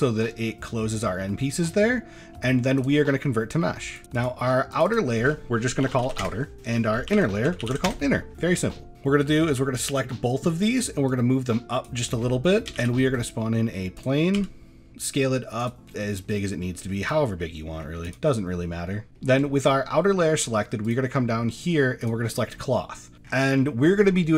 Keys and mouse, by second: 0.3 middle click, 1.5 shift+middle drag, 1.9 middle drag, 2.9-4.0 right drag, 4.2 click, 4.7 click, 4.9-6.2 drag, 6.5-7.9 drag, 7.5 n, 8.7 middle click, 11.2 click, 12.3 middle click, 12.8 shift+a, 14.3 s, 16.1 middle click, 16.7 shift+middle click, 17.4 middle click, 18.0 click, 19.1 middle drag, 19.5 shift+middle click, 20.8 click, 22.0 click, 22.8 middle click.